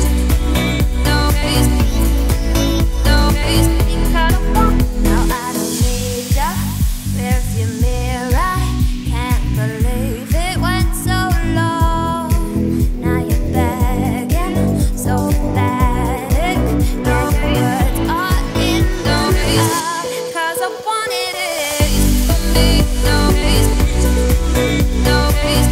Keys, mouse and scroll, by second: 0.2-0.6 scroll up 3, 0.6 shift+middle drag, 0.8-1.2 scroll up 3, 1.2-2.4 middle drag, 2.4-3.0 scroll down 2, 4.9-7.3 shift+drag, 7.3 scroll down 2, 7.4-8.7 middle drag, 8.7-9.1 scroll up 1, 9.1 q, 11.0-12.2 drag, 12.2-13.1 scroll up 1, 13.5 Tab, 13.8 middle click, 14.4 click, 15.0 alt+click, 15.8 `, 16.4 middle click, 16.6-17.2 scroll down 6, 17.2 shift+middle click, 17.5-18.2 scroll up 1, 18.2 alt+shift+click, 18.8-19.2 scroll down 2, 19.2 z, 20.0 z, 20.4 middle click, 21.1 shift+d, 22.7 p, 23.3 Tab, 23.8 click, 24.2 click, 24.7 click, 25.4 click.